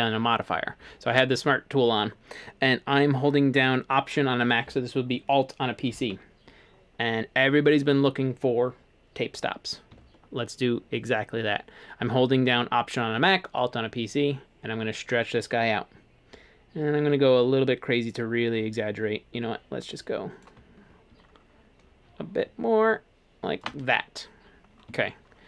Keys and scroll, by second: 19.1 alt+Escape.